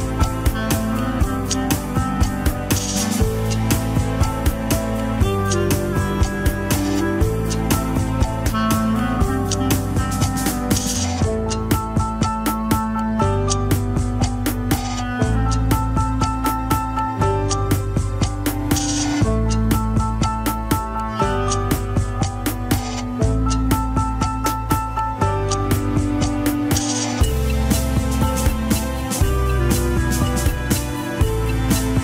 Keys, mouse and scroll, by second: 0.4 KP_3, 0.7 g, 2.0 r, 2.8 g, 3.9 KP_1, 4.6 Tab, 5.4 click, 5.8-6.2 shift+middle drag, 6.2 Tab, 6.3 s, 7.3 Tab, 7.6 click, 8.5 click, 8.7 alt+z, 9.1 Tab, 9.5 alt+z, 9.6 s, 10.1 Tab, 10.4 click, 10.8 Tab, 11.1 s, 11.7 KP_3, 12.2 g, 14.1-16.2 drag, 17.1 scroll down 1, 17.3 s, 19.0 s, 20.7 g, 21.3 KP_1, 21.7 Tab, 21.7 scroll up 2, 22.3 click, 22.6 Tab, 22.8 click, 23.3 l, 24.6 r, 26.0 KP_3, 26.3 g, 29.6 KP_1, 30.5 Tab, 30.8 click, 31.0 Tab, 31.2 s.